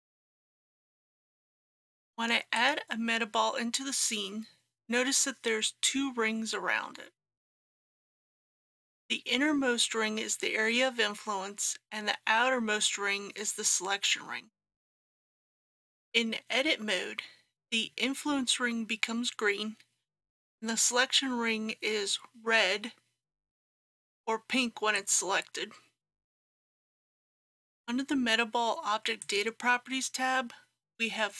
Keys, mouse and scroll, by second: 2.6 click, 15.3 Tab, 23.6-31.3 drag.